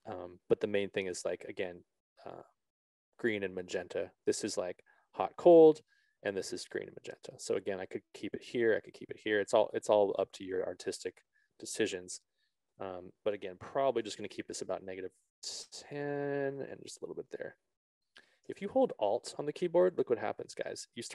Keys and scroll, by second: 14.0 ctrl+z, 14.2 KP_Subtract, 14.4 1, 14.7 Return.